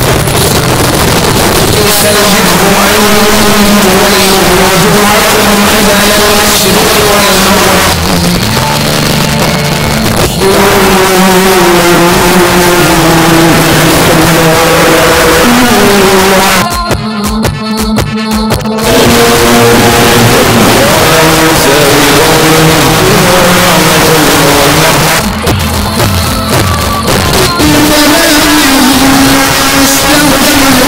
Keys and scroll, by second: 7.8 Page_Down, 16.4 Page_Down, 25.0 Page_Down.